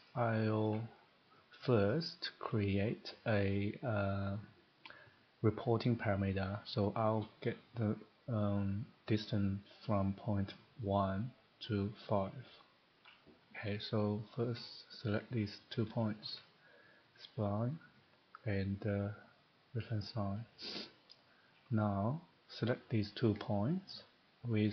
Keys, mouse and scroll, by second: 0.8 shift+middle click, 1.4 middle click, 1.6-1.9 scroll, 2.2 middle click, 4.3 scroll down 1, 14.3 click, 15.7 ctrl+click, 17.0 click, 19.3 click, 21.5 click, 22.7 click, 23.8 ctrl+click.